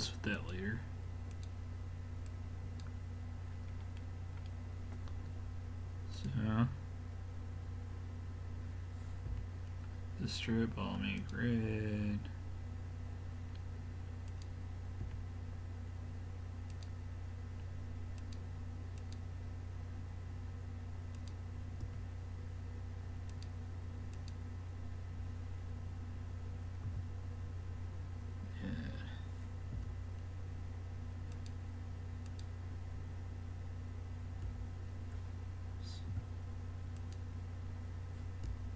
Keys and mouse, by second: 0.4-3.7 drag, 3.7-6.2 middle drag, 6.2-8.0 drag, 9.3 l, 11.2-13.0 drag, 14.3-16.1 drag, 15.0 l, 16.7-20.8 drag, 21.2-23.1 drag, 21.9 l, 23.3-25.9 drag, 26.9 a, 29.8 l, 31.4-34.2 drag, 34.5 l, 36.1 a, 37.0-38.7 drag, 38.5 l.